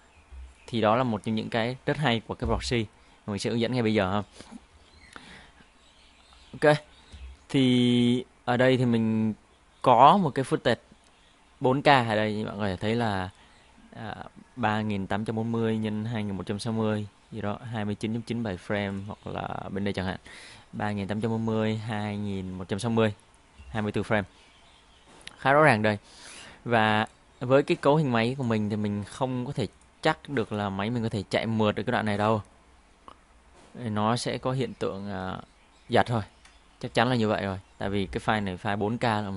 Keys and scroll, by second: 6.4 Delete, 33.2 Home, 36.8 Home.